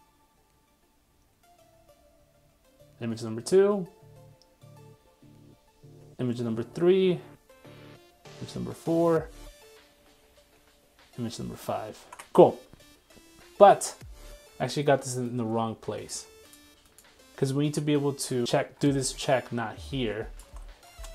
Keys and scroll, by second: 12.0 super+Tab, 20.4 super+x.